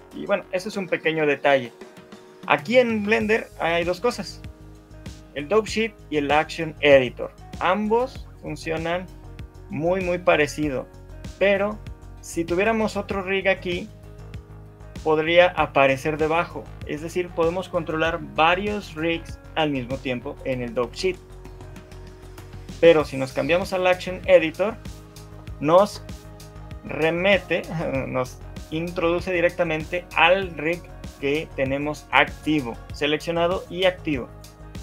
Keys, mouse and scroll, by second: 10.9 click, 34.4 click.